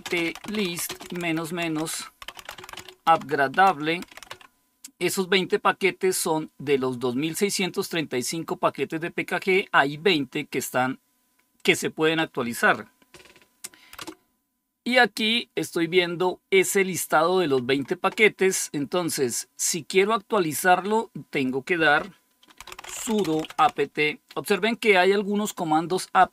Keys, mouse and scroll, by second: 0.0-4.7 typing, 7.7-10.0 drag, 11.4 click, 12.2 click, 13.9 Return, 21.2 click, 22.3-24.0 typing.